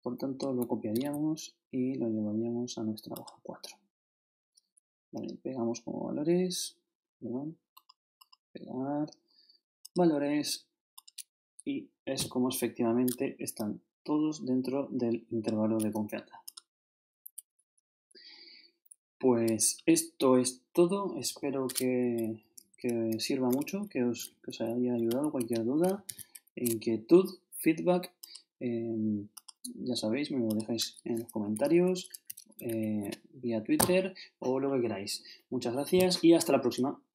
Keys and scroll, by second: 0.9 shift+super+c, 22.2 shift+Down, 23.5 shift+super+Up, 23.7 shift+super+Left, 24.3 shift+super+Down, 25.1 shift+super+Left, 31.6 shift+super+Left, 31.8 super+Up, 32.7 shift+super+Left.